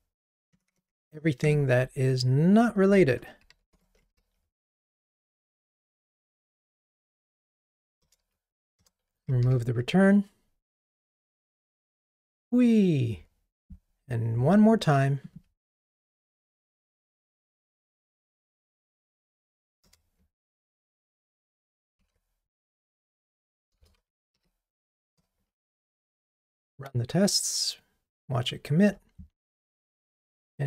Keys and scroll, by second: 3.6 super+BackSpace, 3.7 shift+Tab, 4.2 ctrl+r, 8.1 alt+Return, 9.5 ctrl+r, 15.8 alt+Up, 16.7 super+c, 22.1 super+v, 25.2 Return, 25.9 ctrl+r.